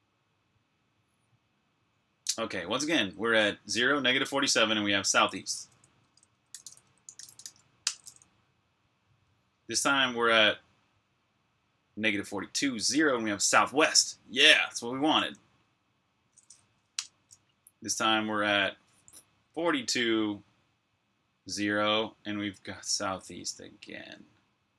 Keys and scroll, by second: 6.4-7.7 typing, 16.6 Up.